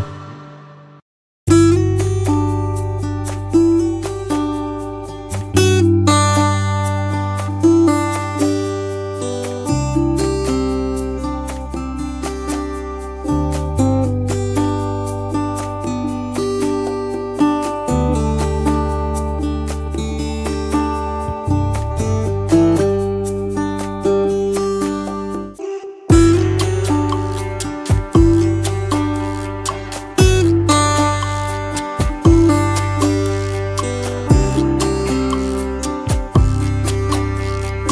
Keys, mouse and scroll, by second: 1.9 alt+scroll up 1, 2.2 space, 5.2 space, 5.6 double click, 5.7 space, 6.3-6.6 alt+scroll down 1, 8.6 alt+scroll down 1, 8.9 space, 9.6 alt+scroll up 1, 9.7 alt+scroll down 1, 17.5 double click, 20.1 alt+scroll up 1, 21.4 shift+click, 28.5 space, 34.1 t.